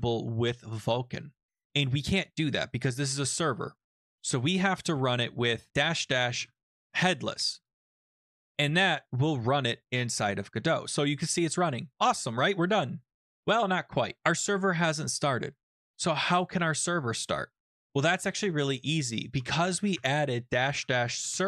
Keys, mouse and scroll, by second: 5.7-7.5 typing, 7.6 Return, 17.2 ctrl+c, 19.3 Up, 19.9 Up, 20.4-21.4 typing.